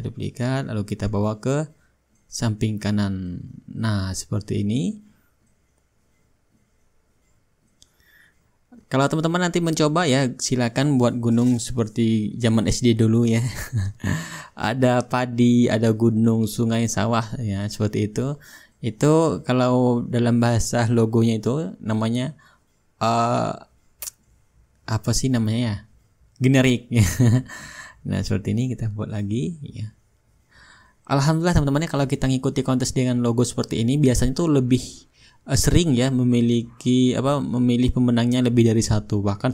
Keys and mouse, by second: 0.2-12.2 right drag, 5.6-12.2 drag, 14.3-15.4 drag, 16.9-18.9 drag, 20.7-22.2 drag, 22.6-23.7 drag, 24.5-25.6 shift+drag, 25.9-27.2 drag, 27.7-28.8 drag, 29.4-30.5 drag, 36.5-37.7 drag, 38.4-39.5 drag.